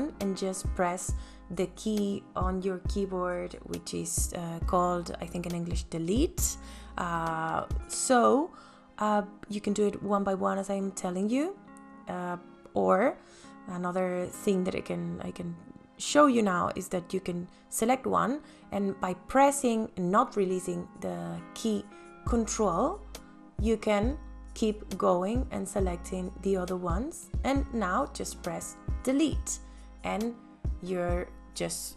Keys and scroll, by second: 4.6 Delete, 29.2 Delete.